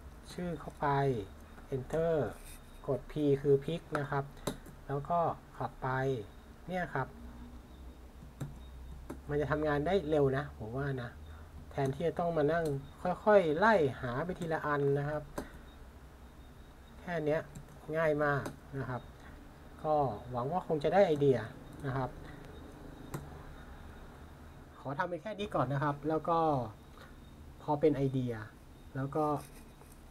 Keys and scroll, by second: 0.3 Return, 1.9 p, 3.6 typing, 8.4 super+c, 11.8 super+v, 12.6 Return, 14.4 p, 17.5 super+c, 21.1 super+v, 21.7 Return, 23.1 p.